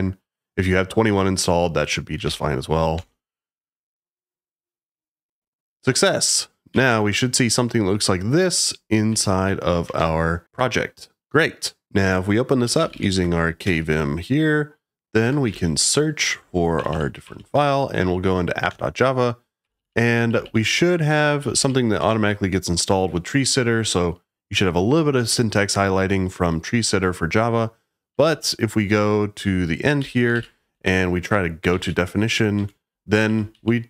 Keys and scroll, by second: 1.9-2.7 typing, 2.9 Return, 6.4-7.2 typing, 9.1 e, 9.8 BackSpace, 12.4-13.6 typing, 15.2-16.0 typing, 16.7 Down, 16.9 Down, 17.2 Down, 18.6 Return, 19.6-22.1 typing, 28.1 j, 28.2 j, 29.7-33.8 typing, 32.5 Escape.